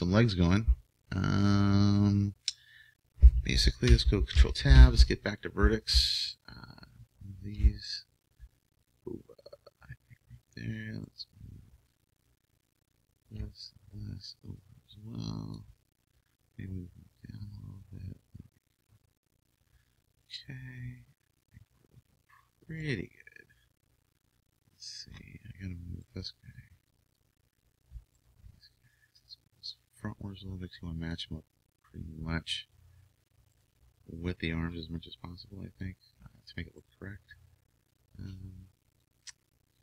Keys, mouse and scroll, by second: 4.3 ctrl+Tab, 5.4 ctrl+Tab, 6.3-9.6 right drag, 8.8-10.6 drag, 11.1-15.6 right drag, 14.6-16.3 drag, 16.7-18.5 drag, 20.2-22.0 middle drag, 22.8-26.1 middle drag, 26.1-28.3 right drag, 26.8-28.3 drag, 30.3 click, 33.6-35.3 right drag, 34.7-36.8 drag, 36.8-39.0 right drag, 37.9-39.7 drag.